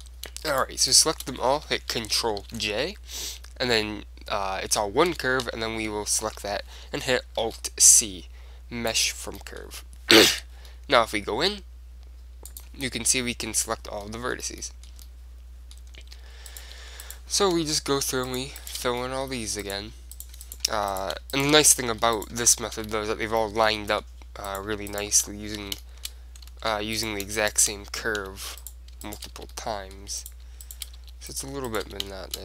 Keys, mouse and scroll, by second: 0.4 middle click, 0.7 click, 0.7-2.9 right drag, 2.6 ctrl+j, 4.9 Tab, 5.2 Tab, 5.6 a, 6.4 a, 7.6 alt+c, 9.5-10.9 middle drag, 10.4 Tab, 12.8-14.5 drag, 14.8-17.9 middle drag, 16.6-20.3 right drag, 18.2 f, 19.0 f, 19.1-22.3 middle drag, 20.3 click, 20.9 f, 21.6 shift+f, 22.3-23.4 right drag, 23.0 f, 23.2-24.6 middle drag, 25.4 right click, 25.7 f, 26.7 ctrl+z, 26.9 middle click, 27.7-29.6 right drag, 28.3 f, 29.5 f, 29.8-31.3 drag, 31.1 f, 31.3 right click, 32.0 f, 32.2-32.4 drag.